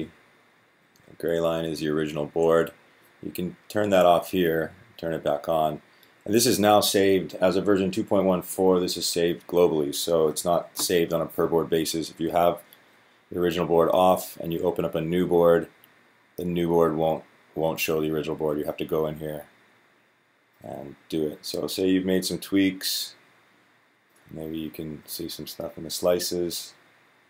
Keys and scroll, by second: 0.4 Down.